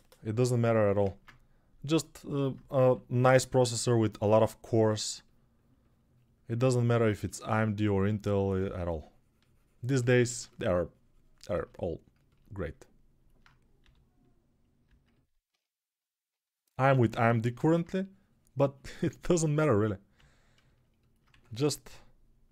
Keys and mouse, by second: 1.2 ctrl+Tab, 2.1-22.5 drag, 2.6 6, 13.6 g, 21.1 1, 21.6 [, 22.1 [, 22.3 [.